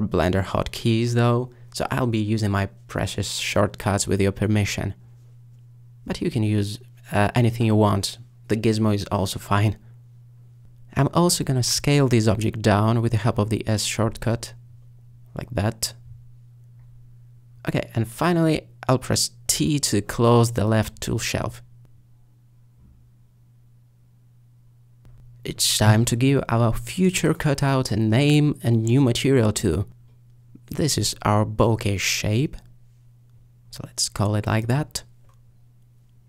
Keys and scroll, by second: 9.3 s, 14.2 s, 15.6 s, 24.2 typing, 29.1-29.8 typing, 30.9-33.4 typing.